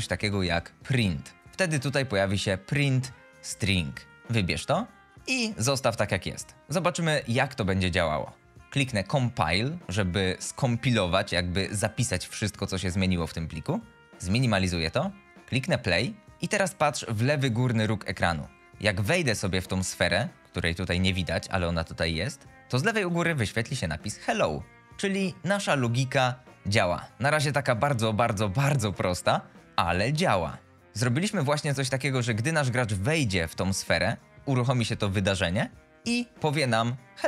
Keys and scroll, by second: 0.0-1.0 typing, 5.4 t, 16.4 F11, 18.0 s, 18.4 d, 24.6 a, 25.0 d, 26.2 a, 27.2 d, 28.1 d, 29.0 shift+Escape, 29.8 F11.